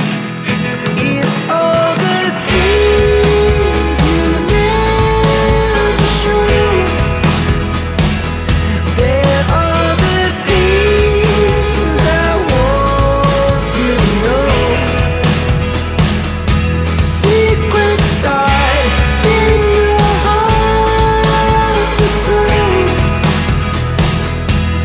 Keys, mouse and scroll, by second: 1.9 right click, 4.4 click, 6.4 click, 6.6 double click, 8.7 click, 9.8 click, 11.8 click, 12.1 right click, 14.7 click, 15.9 click, 17.3 click, 18.2-18.6 scroll down 1, 18.6-19.6 scroll up 1, 20.2-21.2 scroll down 1, 21.7-22.7 scroll down 1, 23.6 click, 24.7 click.